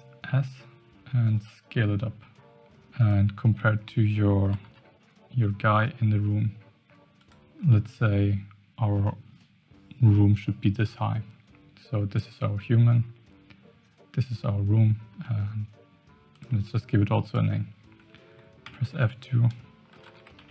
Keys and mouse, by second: 0.2 s, 3.4 Tab, 4.4 g, 7.7-8.1 middle drag, 15.2-16.0 middle drag, 16.3 click, 18.6 F2.